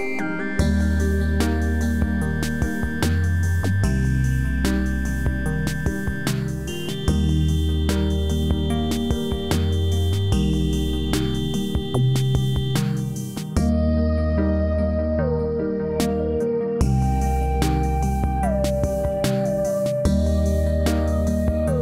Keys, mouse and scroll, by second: 2.8 click, 6.1-7.4 scroll down 1, 7.4 click, 12.2-12.9 drag, 14.6-15.7 scroll up 1, 15.7 click, 18.3 click, 18.8 scroll up 1, 19.1-19.7 alt+middle click, 19.7 scroll down 1, 20.1 alt+scroll up 1, 20.4-21.1 alt+middle drag.